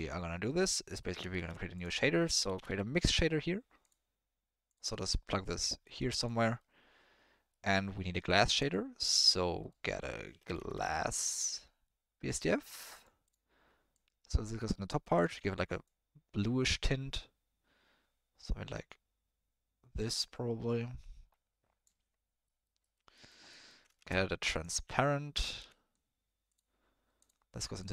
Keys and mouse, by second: 0.8 middle click, 1.4 shift+a, 4.9 middle click, 5.9 click, 6.6 middle click, 8.4 shift+a, 14.1 click, 14.7 middle click, 15.1 click, 22.4 middle click, 22.8 middle click, 23.2 middle click, 23.5 middle click, 23.9 shift+a.